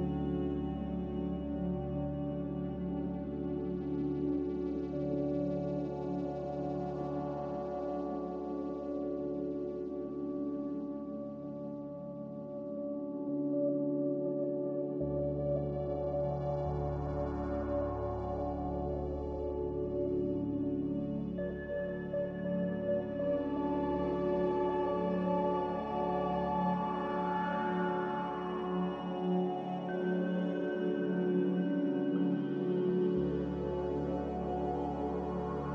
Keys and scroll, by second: 6.1 z, 12.0 z, 21.2 a, 23.3 z, 28.4 a, 35.5 z.